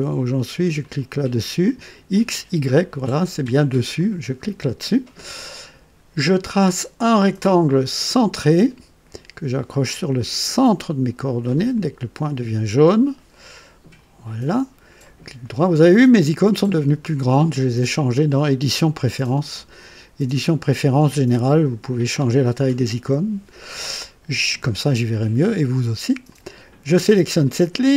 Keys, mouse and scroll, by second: 0.8 click, 3.9 click, 7.1 click, 8.1 click, 11.7 click, 13.9 click, 15.0 right click, 26.2 click.